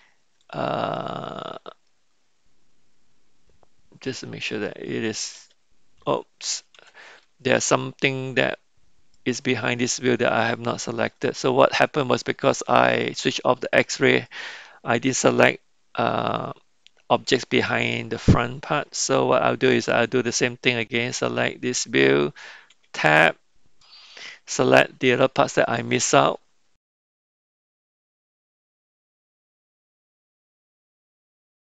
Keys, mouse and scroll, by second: 0.4 click, 1.9-4.6 middle drag, 5.4 g, 7.2-8.4 middle drag, 9.1 middle click, 13.8 click, 22.7 Tab, 23.2 click, 26.7 click, 27.7 Tab, 27.7 click, 27.9 click, 28.2 shift+click, 28.4 click, 29.2 ctrl+j, 29.2 click, 29.6 g, 30.2 middle click.